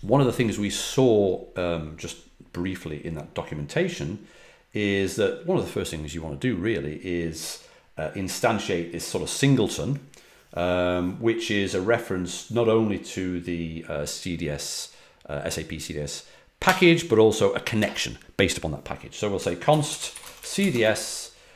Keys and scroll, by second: 19.1-21.2 typing.